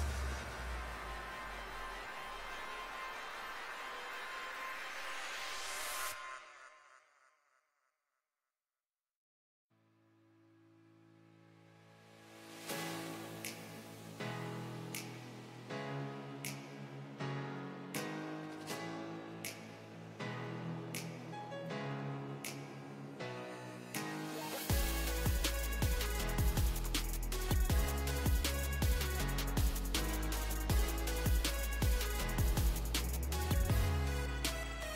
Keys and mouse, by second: 2.0-4.2 shift+right drag, 2.2 shift+z, 3.0 z, 3.5 click, 3.5 middle click, 4.2 z, 4.7 click, 13.0-15.8 ctrl+right drag, 14.0 z, 15.1-19.2 drag, 15.1 middle click, 16.0 z, 19.2 middle click, 20.1 z, 20.8 Tab, 26.7 Tab, 30.2-32.2 drag, 32.9 shift+space.